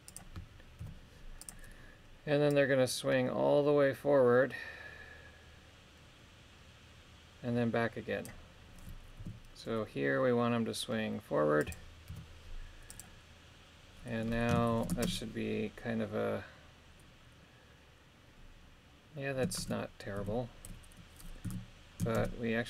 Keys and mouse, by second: 0.8 i, 2.5-8.3 drag, 9.2 r, 11.6 click, 12.1 i, 14.7 shift+Left, 15.0 shift+space, 19.6 shift+space, 20.2 a, 21.4 a, 22.2 shift+space.